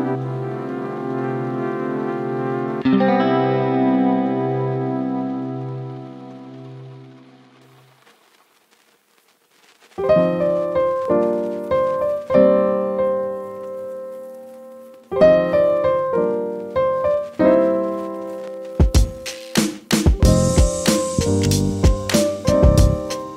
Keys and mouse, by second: 3.9 click, 5.4 -, 7.0-8.8 drag, 8.8 -, 10.2 click, 13.0 click, 14.5 click, 16.7 click, 22.8 click.